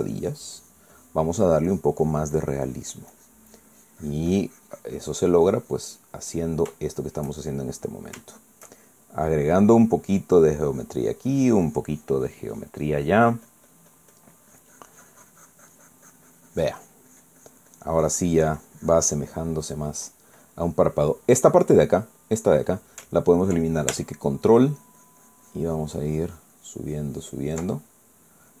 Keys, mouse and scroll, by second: 0.0-1.5 drag, 2.5-7.1 drag, 7.1-8.4 middle drag, 9.3 shift+middle click, 10.3 middle click, 11.0-20.3 drag, 20.3 middle click, 21.0-22.5 middle drag, 25.5-28.6 ctrl+drag.